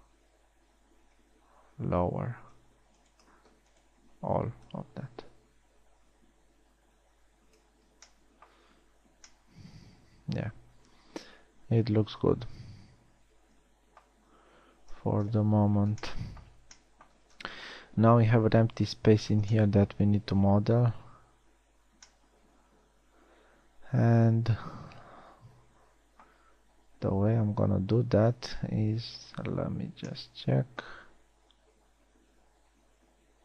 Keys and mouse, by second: 8.5 a, 15.5 KP_1, 16.1 z, 22.3 z, 28.8 KP_1.